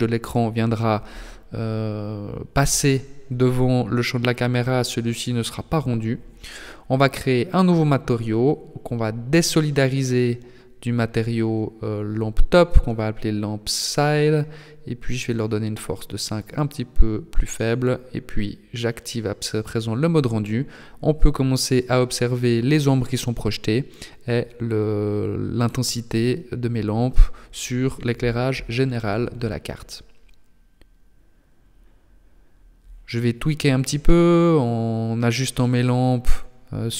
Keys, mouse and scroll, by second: 2.3 click, 3.3 click, 5.9 click, 6.5 click, 9.5 BackSpace, 9.7 BackSpace, 14.7 click, 16.3 click, 17.7 click, 21.4 click, 30.6 right click, 31.3 KP_3, 33.1 g, 33.7 g, 35.7 r.